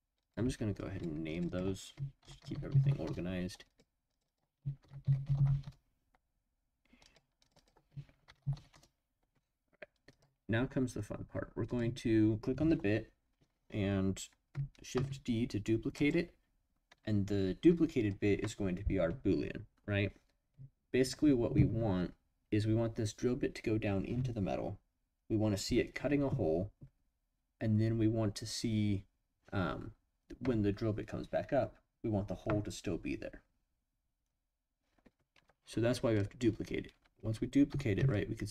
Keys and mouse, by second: 0.2 click, 0.8 click, 1.3 click, 1.5-3.7 drag, 4.2-6.4 drag, 7.5-9.3 drag, 10.1 click, 14.9 shift+d, 15.9 click, 37.7 g, 37.9 z.